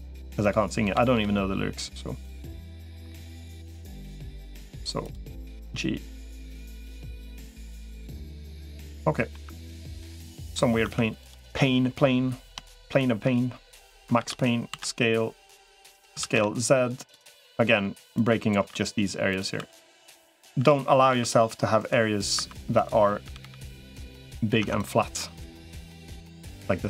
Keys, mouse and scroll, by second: 0.2 click, 0.8 g, 2.4 middle click, 3.0 click, 3.0 3, 3.6 click, 4.8 click, 5.4-6.6 drag, 6.7 middle click, 8.7 middle click, 9.4 Tab, 10.1 middle click, 10.6 Tab, 11.0 click, 13.6 click, 14.0 shift+d, 14.6 s, 16.0 s, 17.2 middle click, 18.0 click, 18.4 e, 19.4 s, 20.4 s, 22.6 click, 22.6 2, 23.2 g, 24.4 Tab, 25.0-26.3 middle drag.